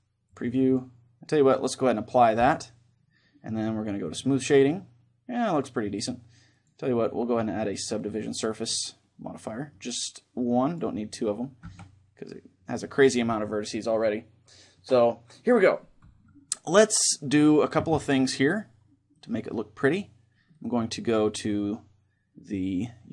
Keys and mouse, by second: 0.0-5.4 drag, 4.4-6.2 middle drag, 6.2-8.4 drag, 9.0-10.4 middle drag, 10.4-12.4 drag, 11.4 Tab, 12.6 Tab, 13.6-15.4 middle drag, 18.8-23.1 drag.